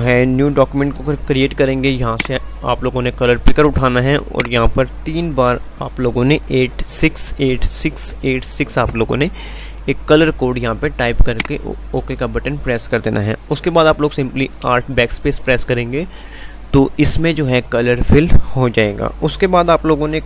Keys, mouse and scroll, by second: 2.1 click, 11.5 click, 14.8 alt+BackSpace.